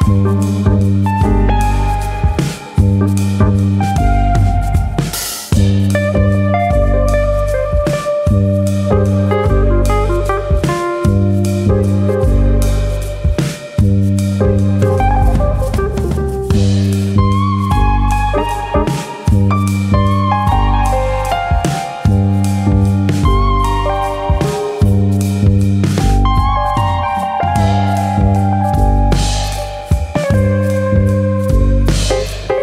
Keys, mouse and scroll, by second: 1.8 scroll up 1, 2.1 middle click, 2.7 KP_Divide, 3.4 shift+middle click, 3.7-4.5 scroll up 5, 4.2 middle click, 4.5 shift+middle click, 4.7 middle click, 6.0 ctrl+r, 7.7 click, 8.3 alt+click, 9.0 alt+shift+click, 9.0 middle click, 10.1 alt+click, 10.6 s, 11.2 click, 11.7 alt+click, 12.2 alt+shift+click, 12.6 middle click, 13.4 middle click, 14.3 ctrl+e, 15.1 middle click, 15.7 scroll up 1, 16.3 click, 16.3 scroll up 1, 16.6 middle click, 17.7 ctrl+click, 18.1 middle click, 18.9 ctrl+e, 20.4 scroll down 3, 20.8 middle click, 21.1-21.4 scroll up 2, 22.1 ctrl+r, 23.6 click, 24.3 ctrl+e, 25.2 middle click, 25.8 shift+middle click, 26.1-26.5 scroll up 2, 26.5 middle click, 27.0 click, 27.6 shift+click, 28.3 ctrl+e, 29.1-29.4 scroll down 2, 29.4 scroll up 1, 29.4 middle click, 29.8-31.1 scroll down 2, 30.3 middle click, 31.1 middle click, 31.5 shift+middle click, 31.9 shift+middle click, 31.9 middle click, 32.5 click.